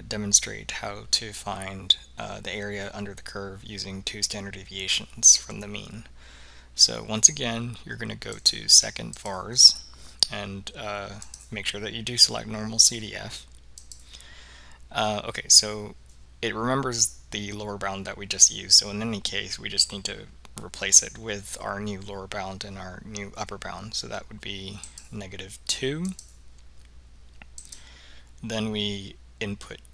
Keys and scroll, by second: 11.3 Down, 13.9 Return, 26.2 2, 27.7 Return.